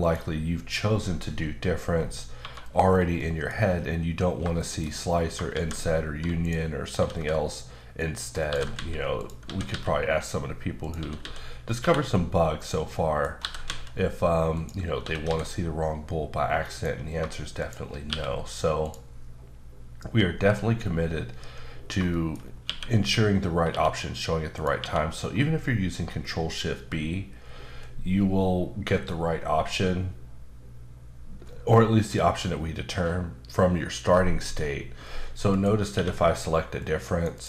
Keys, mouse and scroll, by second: 0.0 click, 1.9-2.4 scroll down 3, 2.8-3.2 scroll down 3, 3.2 middle click, 3.6-4.4 scroll up 2, 4.6 shift+middle click, 4.9-5.3 scroll up 1, 5.5 shift+a, 6.4 click, 6.9 s, 8.4 click, 8.7-9.7 typing, 9.2 click, 10.8 click, 10.9-11.8 typing, 12.6 click, 12.8-13.4 scroll up 2, 12.9 middle click, 13.4 typing, 14.6 click, 15.0 typing, 16.7 click, 17.6 click, 18.1 q, 18.8 click, 20.0-22.0 scroll down 1, 22.1 shift+middle click, 22.4 scroll up 2, 22.6 q, 23.7 q, 24.5 click, 24.8 q, 35.5 click, 35.9 q, 36.8 click, 37.3 double click.